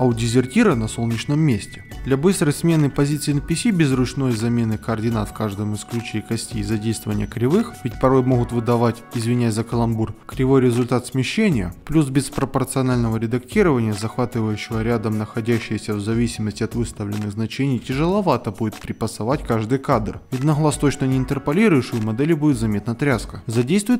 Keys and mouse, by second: 0.0 ctrl+Tab, 0.0 click, 0.3 middle click, 1.9 alt+KP_1, 2.5 ctrl+Tab, 2.8 a, 3.0 KP_Decimal, 3.5 ctrl+middle click, 5.3 KP_Decimal, 6.1 click, 6.4 KP_Decimal, 7.3 ctrl+click, 9.0 click, 9.4 g, 10.1 a, 10.4 KP_Decimal, 11.6 click, 11.9 a, 12.1 KP_Decimal, 12.9 click, 13.2 a, 13.3 KP_Decimal, 14.0-15.6 drag, 15.9 g, 15.9 y, 16.4 click, 17.0 g, 17.3 o, 17.7 g, 17.9 y, 20.6 click, 20.7 space, 21.9 Escape, 23.4 alt+KP_1, 23.6 click, 23.6 ctrl+Tab, 23.8 middle click, 23.9 g, 23.9 a.